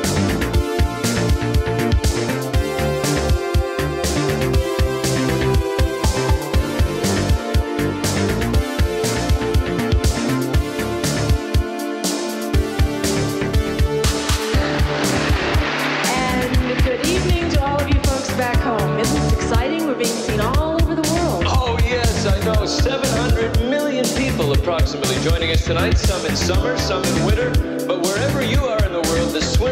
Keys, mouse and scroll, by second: 1.6 space, 5.1 Return, 9.2 click, 15.5 click, 19.5 F2, 20.2 click, 24.1 click, 29.2 space.